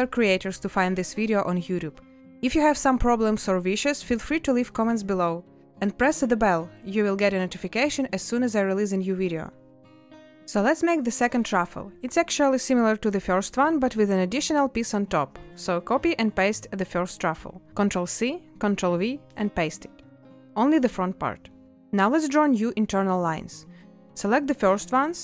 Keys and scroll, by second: 23.3 z.